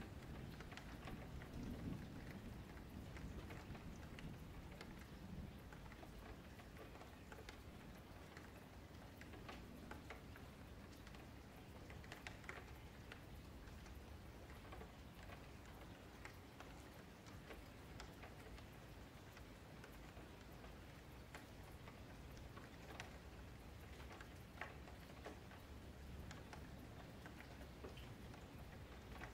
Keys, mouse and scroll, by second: 0.8 a, 0.9 a, 1.7 F4, 2.1-3.1 scroll down 2, 3.1-3.6 scroll up 9, 3.6 middle click, 4.1 scroll down 3, 4.4-5.9 middle drag, 5.9 click, 6.2 middle click, 6.5 Tab, 6.9 3, 7.0 click, 7.9 2, 8.1 click, 8.6 q, 9.3 3, 9.4 click, 10.4 s, 11.9 middle click, 12.6 click, 13.6 s, 15.8 click, 18.5 click, 20.1 click, 21.7 click, 24.3-24.8 scroll up 4, 24.8 shift+middle click, 25.0-25.6 scroll down 1, 25.6 click, 27.9 scroll down 1, 28.0 Tab, 28.2 middle click, 28.7-29.2 scroll down 1, 29.2 middle click.